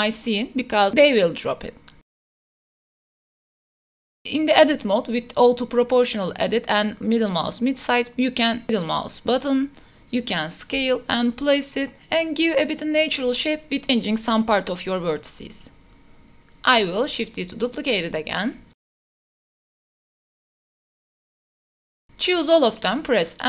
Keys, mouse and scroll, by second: 1.5-1.9 middle drag, 2.3 s, 3.1 g, 3.2 x, 3.8 KP_Decimal, 4.1 middle click, 4.5 shift+middle drag, 5.4 click, 6.1 Tab, 7.3 click, 7.9 g, 10.7 click, 11.7 g, 12.7 click, 13.1 g, 13.4 Tab, 13.7 middle click, 14.2-21.5 typing, 15.1 click, 15.3 Tab, 15.5 Tab, 16.5 click, 16.9 shift+click, 17.5 Tab, 18.4 click, 18.9 drag, 19.3 Tab, 19.4 middle click, 20.5 middle click, 20.8 Tab, 21.7 Tab, 21.8-22.4 shift+drag, 22.9 click.